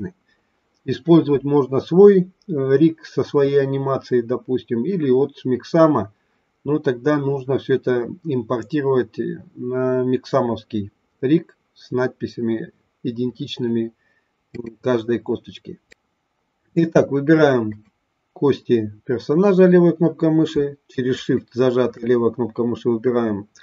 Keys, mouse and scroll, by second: 15.8 click, 17.6 click, 21.0 shift+click.